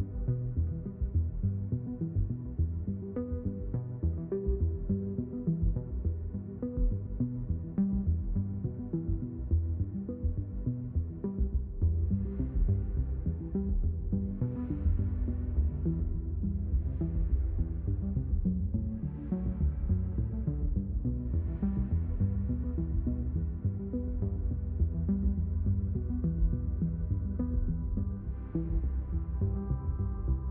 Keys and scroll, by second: 8.9 Return, 12.6 5, 12.9 0, 13.2 Return, 15.2 1, 15.5 0, 15.9 Return, 22.7 1, 23.0 0, 23.4 Return, 24.5 5, 24.9 Return.